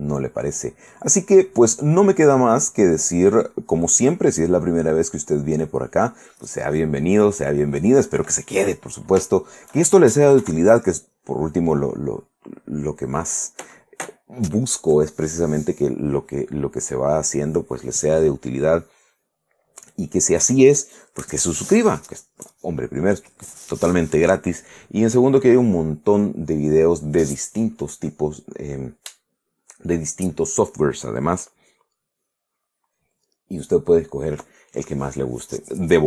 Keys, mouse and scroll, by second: 0.6 middle click, 0.8 click, 1.3 middle click, 2.8 click, 4.8 click, 6.5 middle click, 6.9 middle click, 8.2 middle click, 9.5 shift+middle click, 10.6 shift+KP_1, 12.3 click.